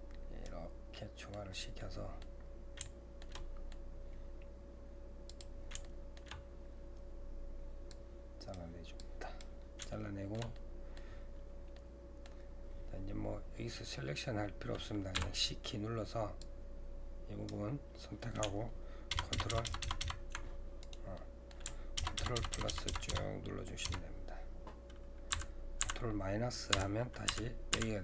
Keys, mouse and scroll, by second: 0.9 middle click, 1.6 scroll down 1, 1.8 middle click, 2.5-2.9 scroll down 2, 2.9-4.1 shift+middle drag, 4.1-5.3 scroll down 1, 5.3 click, 5.9 shift+middle click, 6.5-7.9 scroll down 1, 7.9-9.9 drag, 9.9-14.8 shift+middle drag, 21.2 middle click, 22.0-23.1 ctrl+KP_Add, 25.3 ctrl+KP_Subtract, 25.8 ctrl+KP_Subtract.